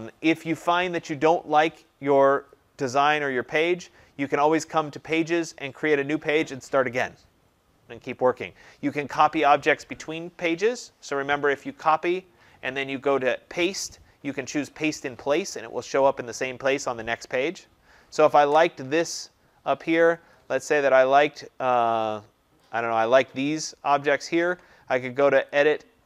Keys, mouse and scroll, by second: 2.4-7.5 drag, 19.9 click, 20.1 click, 21.7 click, 23.1 click, 25.4 click.